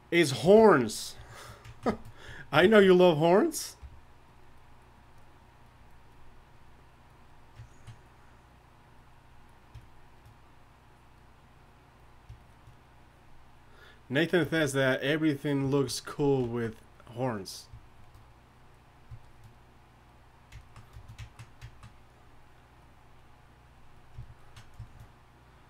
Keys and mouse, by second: 0.4 alt+m, 3.8 f, 7.0-25.6 drag.